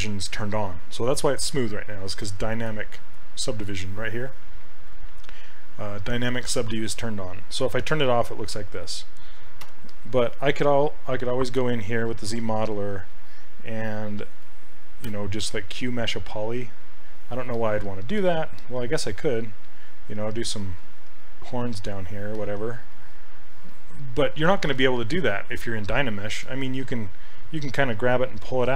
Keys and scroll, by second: 7.9 shift+d, 9.7 d, 12.3 s, 14.5 space, 18.2 ctrl+z.